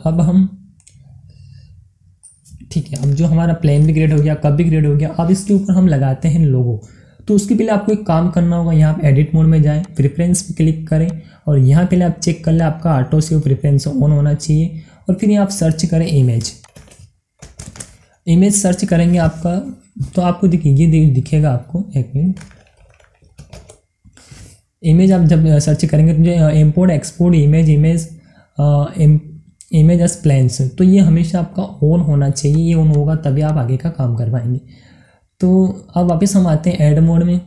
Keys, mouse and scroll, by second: 0.3 scroll up 1, 0.9 scroll down 1, 1.2-5.0 middle drag, 5.0 scroll up 2, 5.7-7.8 middle drag, 7.8 click, 12.5 click, 16.6 click, 17.7-18.6 typing, 24.4 typing, 32.5 click, 36.0 click.